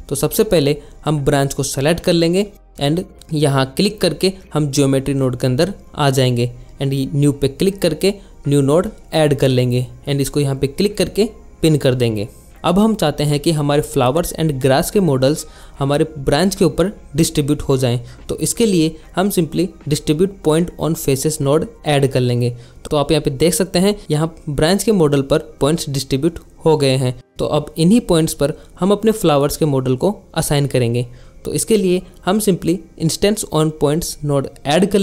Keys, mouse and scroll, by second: 0.8 click, 2.6-4.0 drag, 5.2 click, 7.9 click, 8.6 click, 9.6 click, 9.7 alt+shift+z, 11.7 click, 15.7 shift+a, 19.0 Down, 23.3 alt+shift+z, 32.8 shift+a.